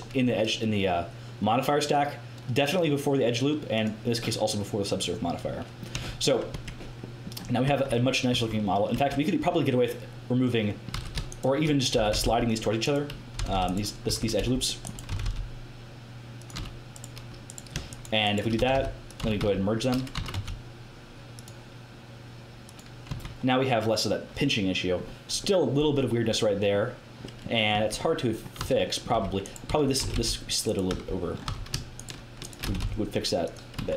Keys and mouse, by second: 1.7-4.4 drag, 4.6 click, 5.9 Tab, 6.5 Tab, 7.6 Tab, 8.3 Tab, 8.9 Tab, 10.9 a, 11.9 g, 13.3 g, 14.0 z, 14.3 c, 15.0 g, 16.5 a, 18.5-20.3 typing, 21.3-22.5 drag, 23.0 Tab, 24.4-26.2 middle drag, 27.7 Tab, 27.7 middle click, 28.5-31.4 typing, 29.3-31.3 right drag, 32.6 g, 33.7 Tab.